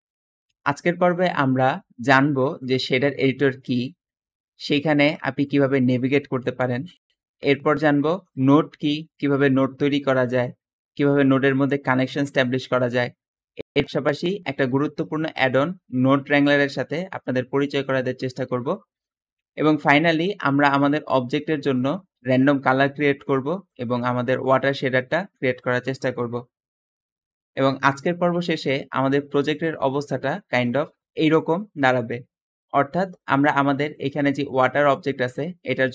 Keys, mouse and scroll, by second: 0.3 Escape, 0.6 Escape, 7.5 Escape, 33.1 `.